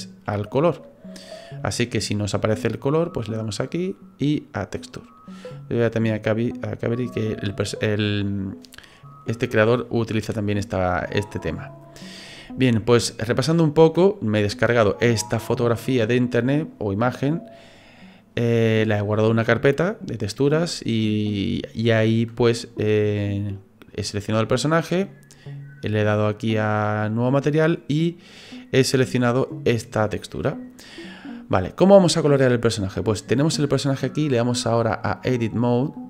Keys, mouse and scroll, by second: 3.6 click, 34.9 click.